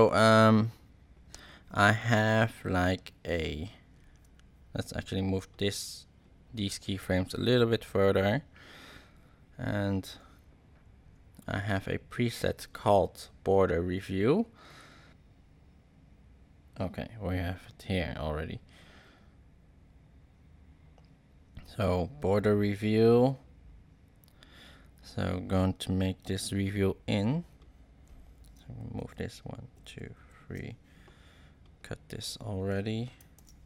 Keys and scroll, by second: 28.9 shift+Right, 33.3 super+k.